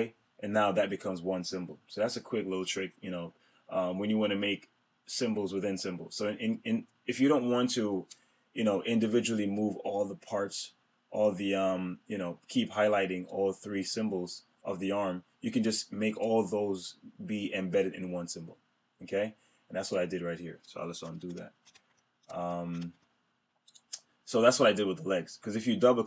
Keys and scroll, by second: 21.0 super+z.